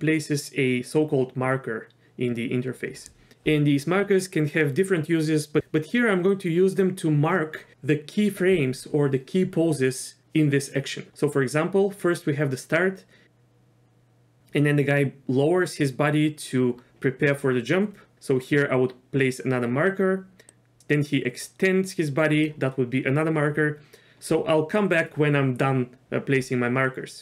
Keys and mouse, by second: 13.2-14.4 drag, 18.1 m, 20.5 click.